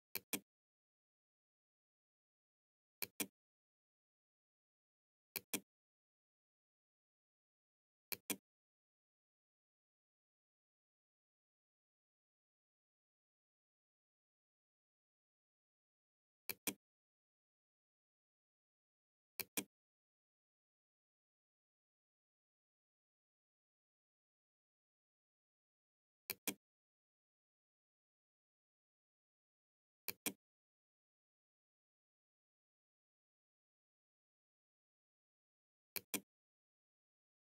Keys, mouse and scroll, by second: 1.7-2.8 drag, 4.4 click, 7.2 click, 15.5 click, 18.4 click, 25.3 click, 28.8 click, 35.0 click.